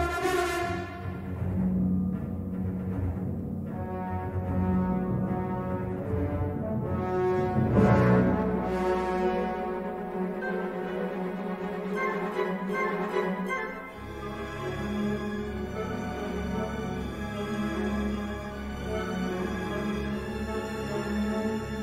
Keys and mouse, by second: 0.4 3, 0.6 click, 1.5 middle click, 6.6 middle click, 7.1 ctrl+z, 8.6 i, 9.4 e, 11.8 e, 13.1 s, 14.6 l, 15.3 shift+d, 15.8 g, 17.3-18.7 middle drag, 20.7-21.7 middle drag.